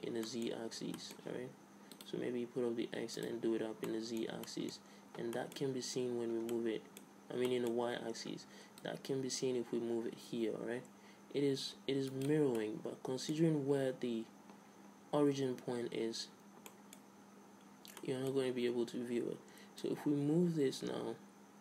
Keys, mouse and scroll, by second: 1.9-5.4 middle drag, 5.0 a, 5.5-8.8 middle drag, 8.8-10.7 drag, 12.6-15.2 middle drag, 15.2-16.7 scroll up 2, 16.7-19.8 middle drag, 19.8-21.6 drag.